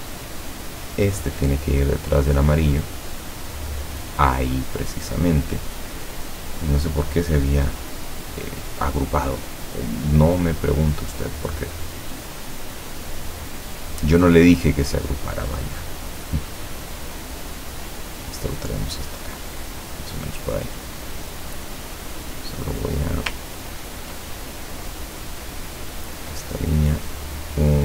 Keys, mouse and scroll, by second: 0.9 click, 3.3 click, 10.2 click, 12.9-17.8 drag, 18.1-21.8 drag, 22.2 click, 23.7-24.2 ctrl+scroll up 2, 24.4 ctrl+click, 25.4 click, 25.8 click, 26.7-27.8 drag.